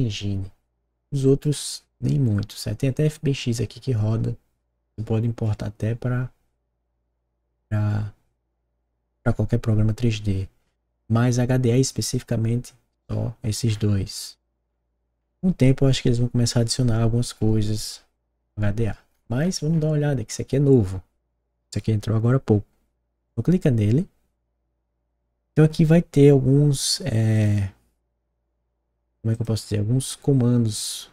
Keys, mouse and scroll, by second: 1.3-1.7 scroll down 2, 10.3 scroll up 1, 13.7 scroll down 1, 14.6-15.6 scroll down 1, 15.6-19.1 scroll down 1, 19.1-19.9 scroll up 3, 23.2 click, 27.3 click, 29.3 click.